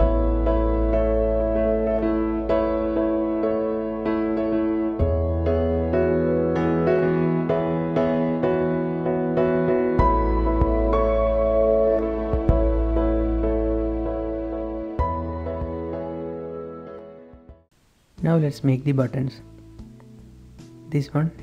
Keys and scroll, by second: 1.6 typing, 2.9-3.8 typing, 8.0-8.6 typing, 10.0 typing, 12.5 g, 13.6 Escape, 13.6-14.5 typing, 15.1 Escape, 15.8-16.6 typing, 18.0 shift+h, 19.7 shift+z.